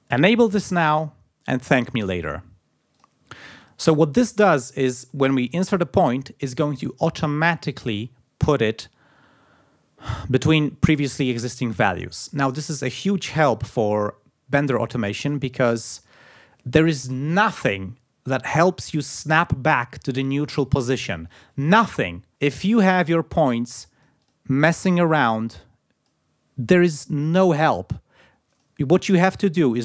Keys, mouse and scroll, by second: 1.0 click, 2.9 click, 4.9 d, 5.5 click, 15.5 click, 23.1 click, 23.5 click, 24.8 click, 25.2-26.3 drag, 27.2-28.8 drag.